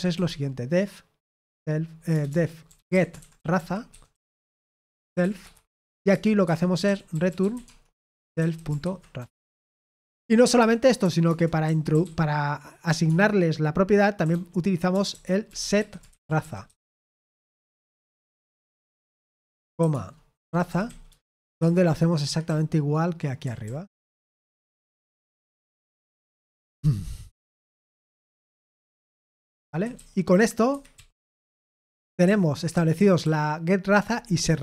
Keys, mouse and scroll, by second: 0.0-10.5 typing, 6.4 Tab, 11.2 Return, 11.6-24.5 typing, 22.2 Escape, 25.2 Escape, 25.9 typing, 27.0-28.5 typing, 29.2 Escape, 29.5-33.2 typing.